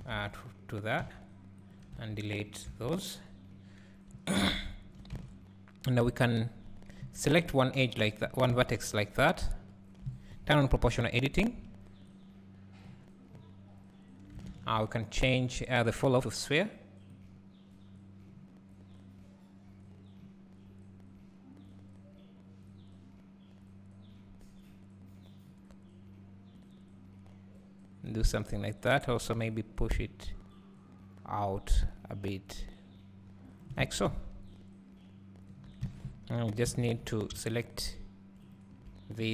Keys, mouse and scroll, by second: 0.0 alt+a, 1.6 c, 2.0 x, 2.7 Tab, 3.2-4.2 scroll down 1, 6.3 click, 7.0 KP_3, 8.3 KP_1, 8.9 ctrl+KP_3, 9.5 ctrl+KP_1, 11.0 o, 12.2-28.2 drag, 14.6 ctrl+z, 29.6-37.6 drag, 34.2 `, 35.9 alt+a, 36.8 Tab, 37.0 2.